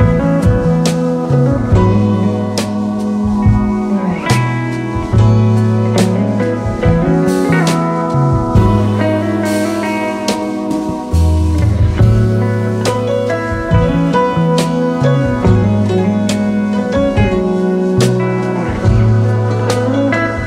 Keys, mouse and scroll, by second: 1.7 typing, 3.8-5.4 typing, 5.1 alt+scroll down 1, 6.8-7.9 alt+scroll down 1, 8.2 space, 8.3 double click, 10.2 ctrl+2, 14.0 right click.